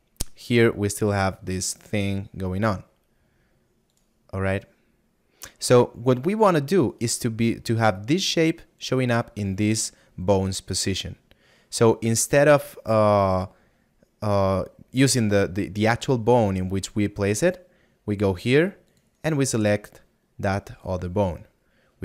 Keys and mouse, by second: 0.4 middle click, 16.0 middle click.